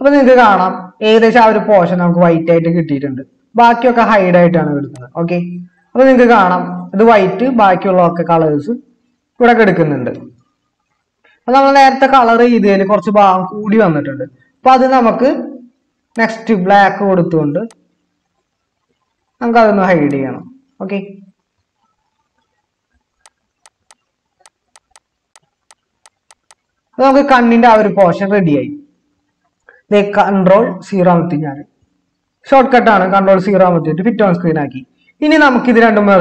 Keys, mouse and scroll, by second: 10.5 ctrl+KP_Add, 30.5 ctrl+0.